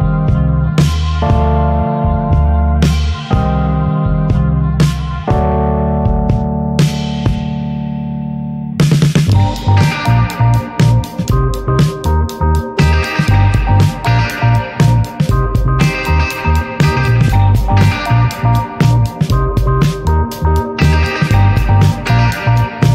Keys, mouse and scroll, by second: 3.2 scroll down 2, 3.3-3.6 middle drag, 3.6 ctrl+s, 4.4 ctrl+shift+click, 4.6 middle click, 5.0 ctrl+s, 5.8 click, 6.5 scroll down 1, 6.6 middle click, 6.9 ctrl+s, 6.9 shift+a, 7.2 shift+a, 9.3 middle click, 9.6 s, 11.7 click, 13.5-15.9 drag, 16.5 scroll up 3, 17.1 middle drag, 17.3 click, 17.4 ctrl+t, 17.7 scroll down 1, 17.9-19.1 middle drag, 19.1-20.8 drag, 20.8 middle click, 21.1 scroll up 1, 21.9-22.9 drag.